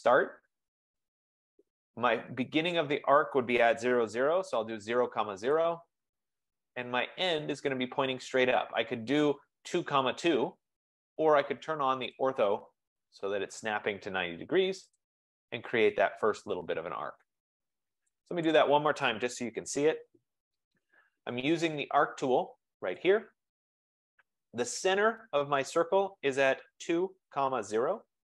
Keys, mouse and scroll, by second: 0.2 typing, 2.0 F15, 3.5-4.7 typing, 5.6 Return, 10.3 Return, 12.3-13.3 drag, 15.0 click, 18.6 click, 19.7-20.7 typing, 23.0 click, 23.7 click, 26.9-28.2 typing, 28.0 click.